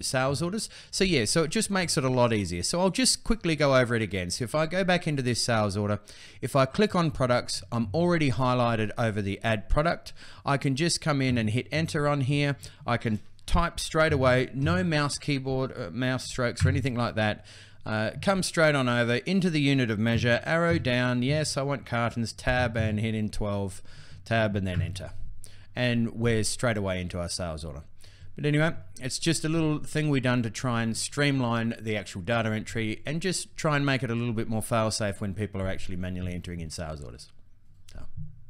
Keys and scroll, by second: 11.0 Return, 13.6-14.9 typing, 16.3 Return, 17.9 Tab, 21.0 Tab, 23.7 Tab, 24.5 Return.